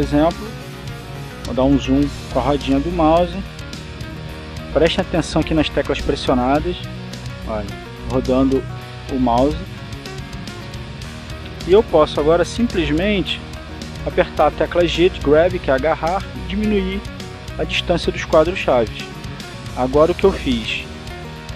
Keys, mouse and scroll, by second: 2.7-3.6 scroll up 2, 4.3 shift+middle click, 5.1 shift+click, 5.6 click, 8.2-9.6 scroll up 2, 9.6 scroll down 2, 9.9 scroll up 2, 10.1 scroll down 2, 10.3 scroll up 2, 10.4 scroll down 2, 10.6 scroll up 2, 10.9 scroll down 2, 11.0 scroll up 2, 11.1 scroll down 2, 11.3-12.1 scroll up 2, 12.1 shift+scroll up 1, 12.2 shift+middle click, 13.4 right click, 16.1 g, 17.4 click, 18.4 right click, 18.4 g, 19.1 click, 19.9-21.4 drag.